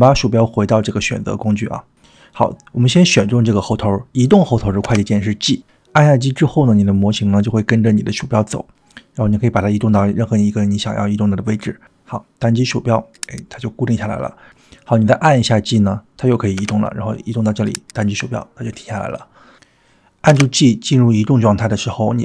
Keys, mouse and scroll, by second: 1.0 click, 2.8 click, 4.9 g, 16.6 g, 20.3 g.